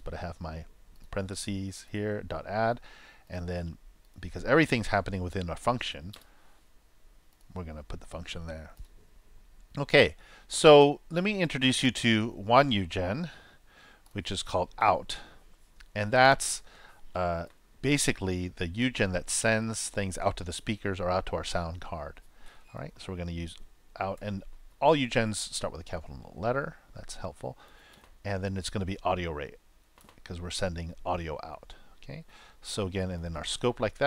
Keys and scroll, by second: 24.1 shift+o, 32.5-33.7 typing.